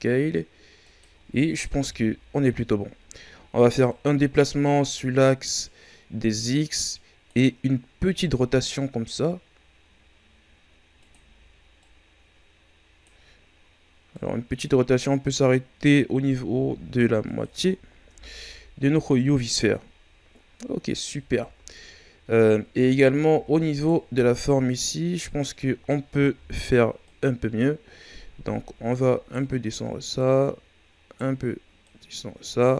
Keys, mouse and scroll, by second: 1.8 KP_1, 3.9-6.8 drag, 8.1 r, 11.8-16.4 drag, 16.4 r, 17.7-18.1 ctrl+scroll down 3, 18.1 Tab, 18.3-18.8 scroll down 5, 19.1-19.5 scroll up 5, 19.8 ctrl+scroll down 5, 20.6-21.1 scroll down 1, 21.1-22.1 shift+scroll down 4, 22.1-22.7 scroll up 2, 22.7 Tab, 23.3 Tab, 23.7 right click, 24.1 Tab, 26.3 o, 27.0 right click, 30.1 right click, 31.8 right click.